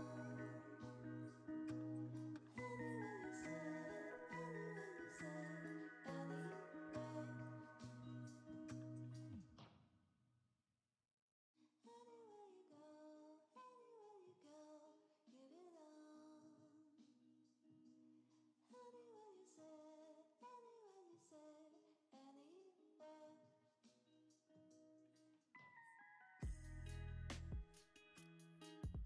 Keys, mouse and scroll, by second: 0.1 g, 1.2 y, 2.4 g, 2.6 x, 4.1 r, 4.1 x, 6.5 9, 7.1 Return, 7.7 r, 8.0 x, 8.2 z, 11.3 g, 11.4 x, 15.4 g, 15.6 y, 16.9 x, 18.5 middle click.